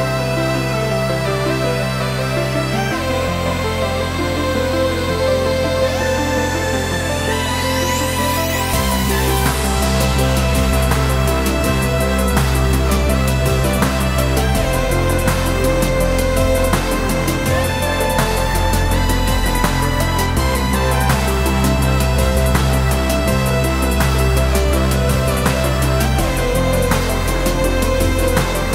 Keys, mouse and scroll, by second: 1.2 click, 1.7 g, 3.1 click, 3.7 scroll down 1, 3.9-28.7 middle drag, 4.4 scroll down 1, 6.9-7.7 scroll down 1, 10.4-11.0 scroll up 1, 24.7-25.1 scroll down 1, 25.3 scroll up 1.